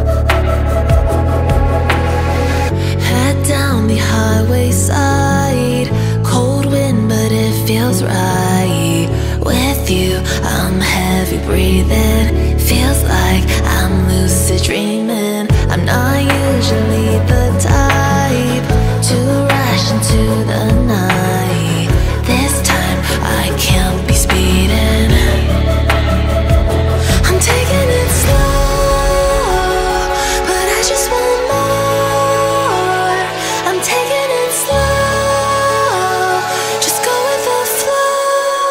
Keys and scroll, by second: 11.1 space, 24.2 ctrl+v, 34.8 Up.